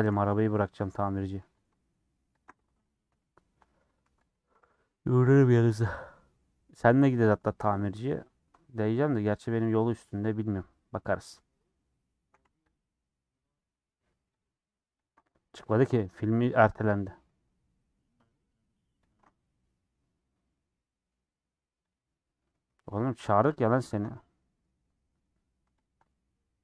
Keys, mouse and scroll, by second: 0.1 /, 0.3 middle click, 0.8 Tab, 1.1 middle click, 1.4 3, 1.6 Left, 1.8 middle click, 2.4 ctrl+Left, 3.1 ;, 3.4 middle click, 4.0 3, 4.3 Left, 5.0 middle click, 5.6 click, 6.0 middle click, 6.7 scroll up 1, 7.0 click, 7.3 scroll down 3, 7.8 click, 8.1 click, 10.1-12.4 middle drag, 12.7 click, 13.4-14.4 middle drag, 14.4 ctrl+Left, 15.0 ctrl+Left, 15.7-17.1 middle drag, 17.1 click, 18.4 ctrl+click, 19.1 ctrl+click, 19.6 middle click, 20.0 scroll up 2, 20.2-21.9 middle drag, 21.9 click, 22.3-23.3 middle drag, 23.3 ctrl+click, 23.8 ctrl+click, 24.3-25.8 middle drag, 25.8 ctrl+click, 26.2-26.6 middle drag.